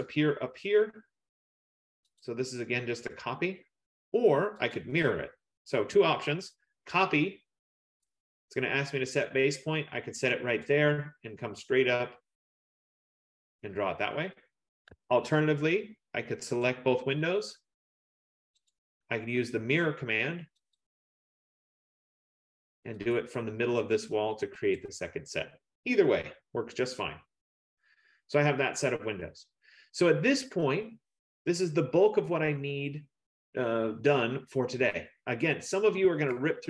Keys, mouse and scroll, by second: 2.4 click, 4.8 click, 8.2 click, 10.7 click, 15.1 Escape, 16.0 F15, 16.8 click, 18.7 click, 20.9 click, 23.2 click, 24.8 click, 25.9 Return, 27.5 middle click, 27.8 middle click, 34.4 middle click, 34.8-36.6 scroll.